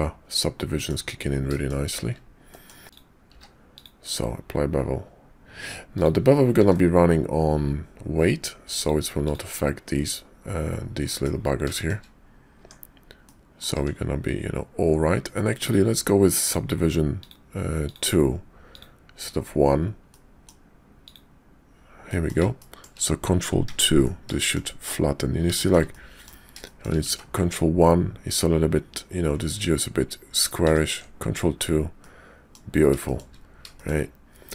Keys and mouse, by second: 1.5 shift+click, 2.5 click, 2.8 q, 2.9 click, 3.3 q, 6.6 ctrl+`, 11.0 middle click, 11.7 shift+middle click, 12.6 Tab, 13.2 middle click, 13.7 Tab, 15.6 click, 16.4 click, 17.2 click, 17.9 click, 20.1 middle click, 21.0 click, 22.1 middle click, 22.6 shift+click, 23.6 ctrl+2, 24.4 shift+click, 25.5 shift+click, 25.9 click, 26.6 shift+click, 27.2 ctrl+z, 30.6 ctrl+2, 32.0 middle click, 33.0 shift+middle click, 33.7 shift+click.